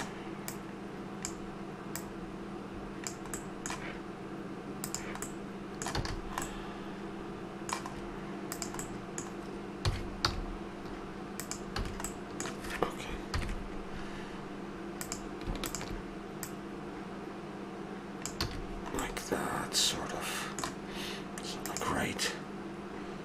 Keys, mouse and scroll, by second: 0.5-3.4 drag, 3.4 middle click, 4.8-5.4 drag, 6.0 a, 6.9-8.3 middle drag, 8.5-9.3 right drag, 9.8 s, 11.3 click, 11.8 a, 13.3 KP_3, 15.0-16.6 right drag, 18.5 a, 18.7-21.3 middle drag.